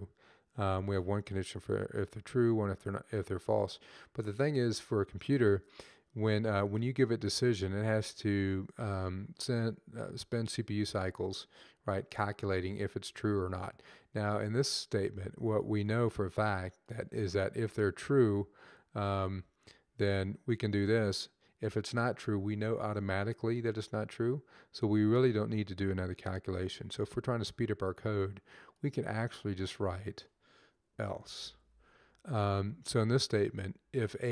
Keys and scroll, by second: 30.5-31.9 typing, 32.3 Up, 33.4 Left, 33.5 Up, 33.8 Up.